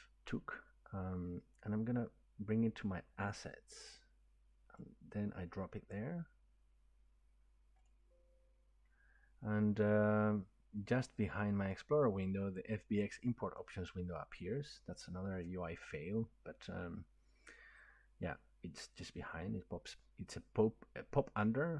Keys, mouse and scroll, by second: 4.7 click, 7.9 click, 11.7 click, 13.5 click.